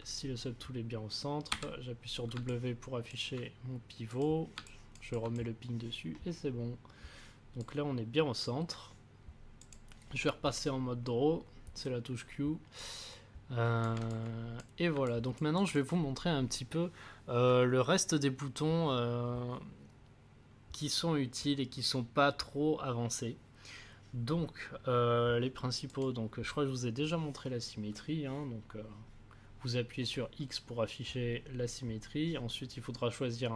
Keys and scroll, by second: 1.5 w.